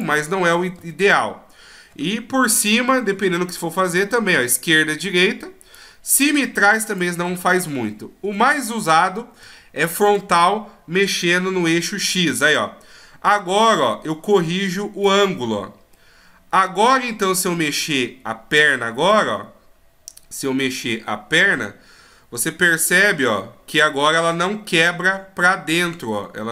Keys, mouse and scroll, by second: 0.8 ctrl+z, 2.5 KP_7, 3.2-3.9 scroll down 1, 3.9 click, 5.8 click, 7.3 ctrl+z, 8.2 KP_1, 8.9-10.3 scroll up 3, 12.5 click, 15.9 middle click, 18.6 right click, 19.2 middle click, 21.4 g.